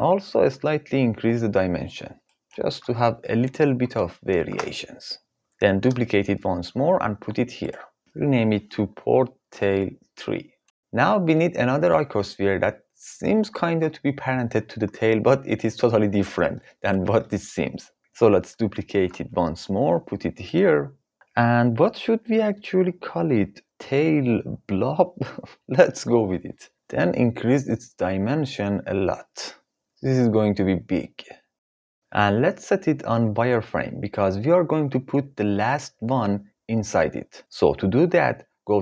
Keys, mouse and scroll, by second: 0.6-3.2 drag, 5.3 x, 5.3 shift+s, 5.8 shift+d, 8.1 F2, 18.5 shift+d, 20.0 click, 22.0 F2, 28.0-31.6 shift+drag.